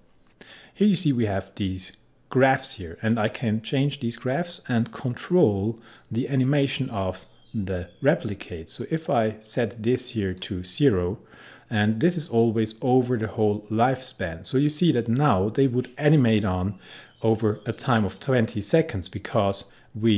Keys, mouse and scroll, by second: 8.8-20.1 drag.